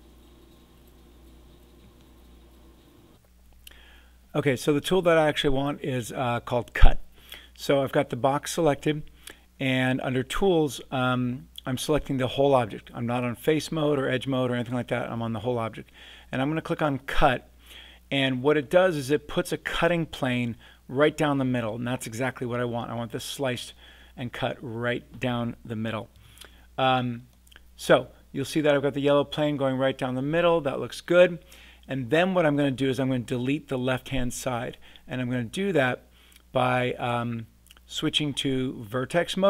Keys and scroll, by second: 3.1 super+z, 26.1 a.